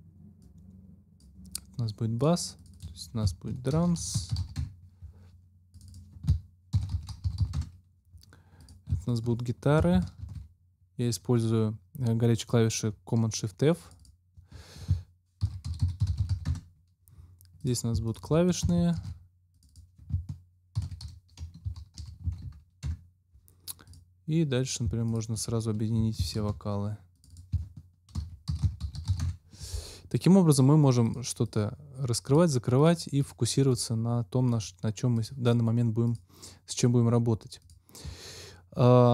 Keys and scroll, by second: 3.4-4.9 typing, 6.4-7.7 typing, 10.2 shift+super+f, 15.1-16.7 typing, 18.9 shift+super+f, 20.7-22.7 typing, 22.8 Return, 26.3 shift+super+f, 27.9-29.5 typing.